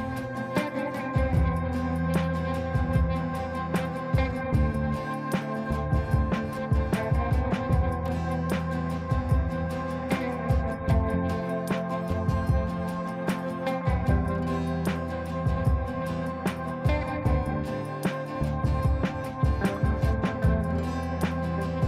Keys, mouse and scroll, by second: 2.4 click, 4.7 right click, 5.8 click, 12.7 click, 16.1 ctrl+space, 17.0 click, 17.3 right click, 18.8 click.